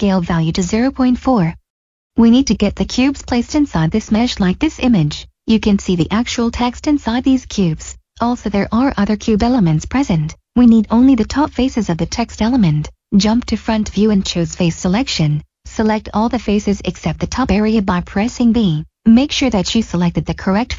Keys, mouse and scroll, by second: 0.0-0.9 typing, 1.2 Return, 9.9 1, 10.6-11.2 scroll up 1, 11.4 shift+middle click, 12.0-12.7 scroll up 1, 12.7 Tab, 13.9 click, 14.4 b, 15.5 scroll up 1, 15.7 b, 17.9 click.